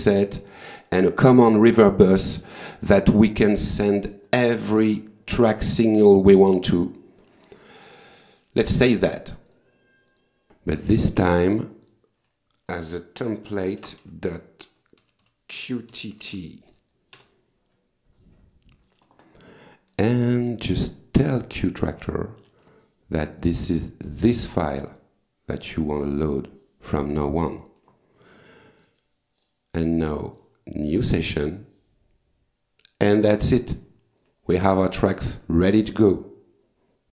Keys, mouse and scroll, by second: 1.8 click, 9.5 click, 10.1 click, 10.9 click, 11.8 click, 13.5 End, 13.8 ctrl+shift+Left, 15.0-16.6 typing, 17.2 Return, 19.9 click, 22.1 click, 23.4 click, 24.8 click, 26.2 click, 28.8 click, 29.4 click, 30.4 click, 35.4 click.